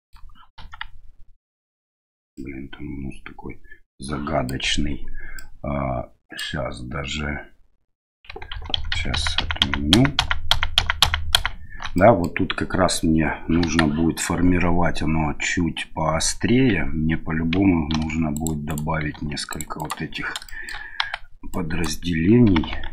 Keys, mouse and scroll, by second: 0.6 KP_1, 2.4-4.5 middle drag, 5.4-6.4 middle drag, 8.5 ctrl+z, 8.8 ctrl+z, 8.9 ctrl+z, 9.1 ctrl+z, 9.4 ctrl+z, 9.6 ctrl+z, 9.9 ctrl+z, 10.2 ctrl+z, 10.5 ctrl+z, 10.8 ctrl+z, 11.0 ctrl+z, 11.4 ctrl+z, 11.9 middle click, 13.6 KP_1, 17.9 ctrl+r, 19.1 ctrl+r, 20.5 middle click, 21.0 1, 21.5 right click, 22.5 g.